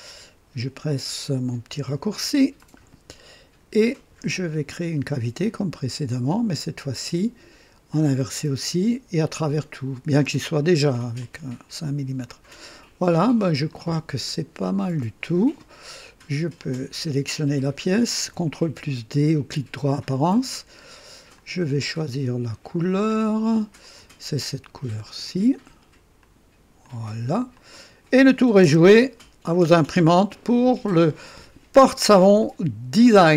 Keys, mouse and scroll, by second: 1.6 &, 2.6-4.0 drag, 5.5 click, 7.9 click, 9.4 click, 10.4 click, 11.2-13.1 drag, 13.7 click, 14.4-14.7 scroll down 1, 15.0-16.0 right drag, 16.6 click, 20.0 ctrl+d, 21.3 click, 23.8 click, 25.0 click, 26.2 click, 26.8 click, 27.5-28.2 drag, 28.6 KP_0, 29.2-30.0 right drag, 30.2 scroll up 1, 32.4-33.3 drag.